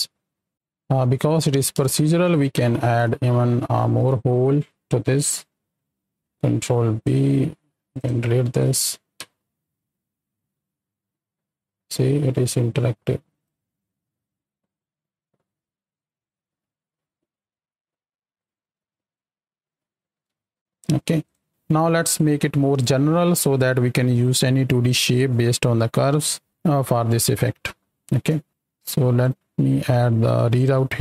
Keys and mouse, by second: 0.4 click, 1.2 space, 1.8 shift+click, 1.8 shift+middle click, 2.2 right click, 2.7 Tab, 3.2 shift+middle click, 4.0 alt+a, 6.2 b, 6.5 click, 7.5 x, 8.6 Tab, 9.2 space, 12.5 right click, 20.7 middle click, 21.2 click, 27.4 middle click, 28.9 shift+right click, 30.7 g.